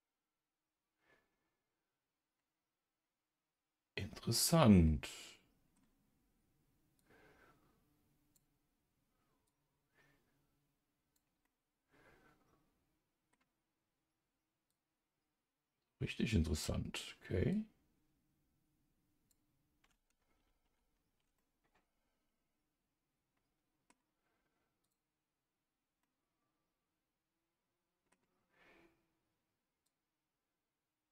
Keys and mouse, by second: 7.0-11.4 drag, 11.4-13.3 middle drag, 14.7-17.2 drag, 17.5-20.2 drag, 20.6 ctrl+z, 21.4-23.9 middle drag, 24.8 click, 26.0-28.1 middle drag, 29.9-31.1 drag.